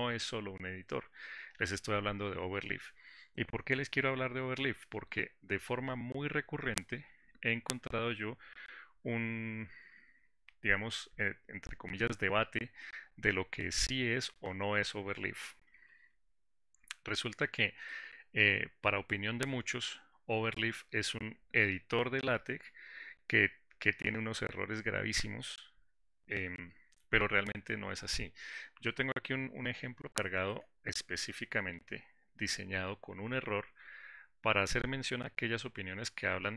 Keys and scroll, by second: 17.6 ctrl+shift+g.